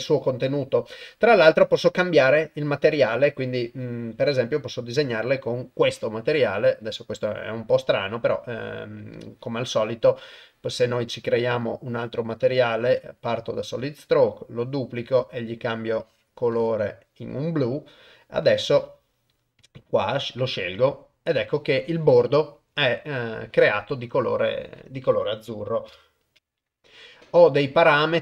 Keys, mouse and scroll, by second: 3.0-5.1 drag, 6.8-7.9 drag, 11.5-13.1 drag, 19.7-20.9 drag, 26.4 ctrl+alt+shift+g.